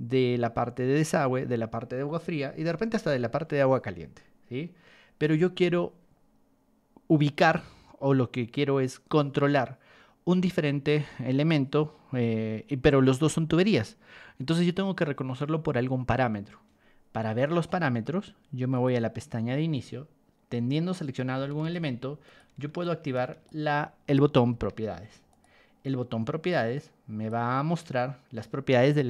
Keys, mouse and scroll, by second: 18.7 click, 21.6 ctrl+1, 22.2 click, 22.8 ctrl+click, 24.5 Escape, 25.3 click, 26.5 click.